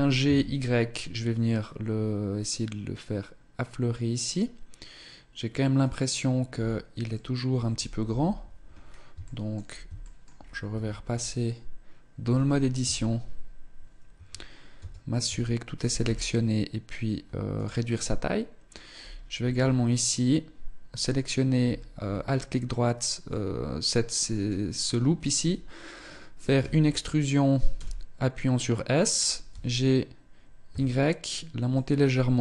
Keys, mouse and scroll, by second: 5.6 click, 6.2-6.8 scroll up 2, 6.8 middle click, 6.8-7.8 scroll up 1, 7.8 KP_1, 8.5 scroll down 4, 9.0 shift+middle click, 9.8 shift+middle click, 10.1-10.4 scroll up 4, 10.4 Tab, 10.8-12.1 scroll up 1, 12.1-12.6 scroll up 1, 12.1 z, 12.6 s, 14.5 a, 15.0 a, 15.4 s, 17.7 middle click, 18.7-19.2 scroll up 3, 19.8 alt+right click, 20.7 alt+right click, 21.8 scroll up 2, 23.0 middle click, 26.4 e, 29.2 g.